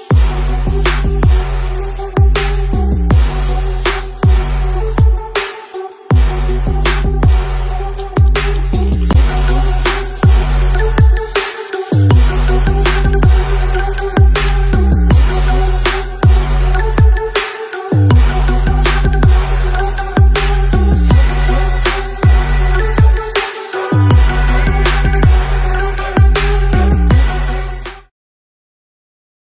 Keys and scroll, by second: 1.4 z, 2.1 space, 2.2 space.